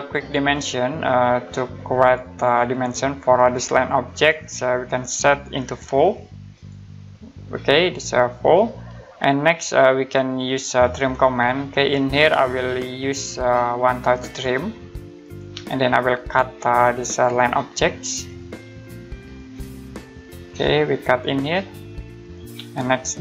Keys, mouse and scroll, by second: 0.5 click, 5.8 4, 6.5 click, 10.8 click, 14.2 click, 16.9 click.